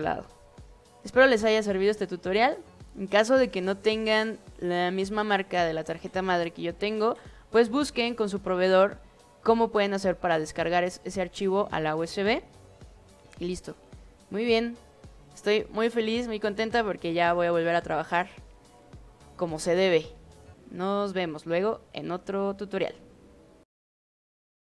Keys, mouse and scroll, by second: 24.7 click.